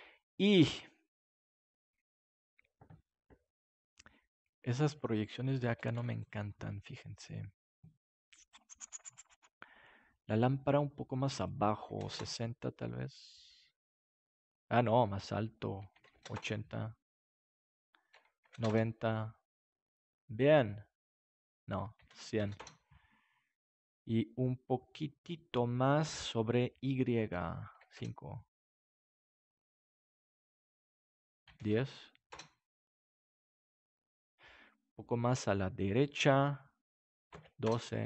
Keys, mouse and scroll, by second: 5.9 ctrl+s, 11.3 click, 18.1 click, 19.0 click, 21.7 click, 22.3 KP_0, 27.3 click, 31.3-32.4 drag, 36.2-37.7 drag.